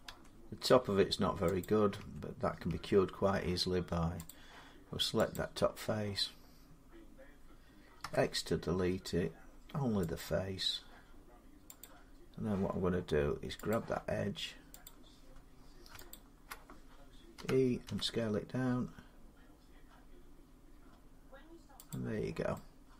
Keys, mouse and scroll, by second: 1.4 click, 1.8 Tab, 2.5 Tab, 4.1 click, 5.1 click, 7.8 x, 10.0 click, 11.6 click, 13.5 click, 14.7 click, 15.9 alt+click, 17.2-17.6 typing, 18.2 Escape, 21.3 alt+click, 21.7-22.9 drag.